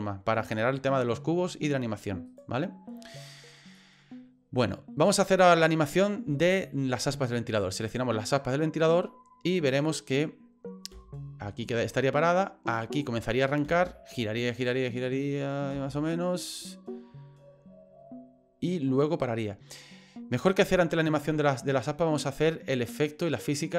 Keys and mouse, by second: 2.3 right click, 3.8-5.1 middle drag, 6.4 shift+middle click, 7.9 right click, 9.7 click, 10.9 space, 12.9 space, 13.6 space, 15.7 space, 16.1-20.5 drag.